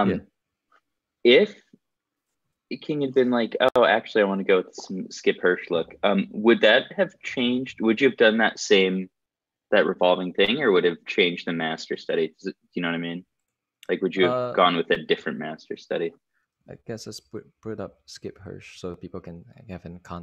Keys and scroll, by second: 13.3 Escape, 14.6 Escape, 16.9 super+t, 17.4-19.8 typing.